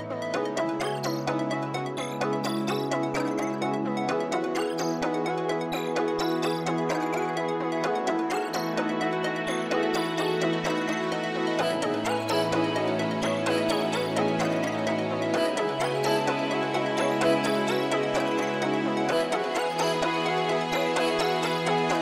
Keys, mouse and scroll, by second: 0.2 scroll up 1, 1.0 middle click, 3.6 right click, 5.9 scroll down 1, 6.1 middle click, 8.8 middle click, 9.2-11.0 scroll up 1, 11.8 middle click, 13.5 scroll down 1, 13.9 middle click, 14.2 scroll up 1, 15.8 middle click, 16.2 scroll up 1, 16.3 middle click, 17.3 scroll down 1, 17.5 middle click, 18.6-20.5 scroll up 1, 20.8-21.3 scroll up 1.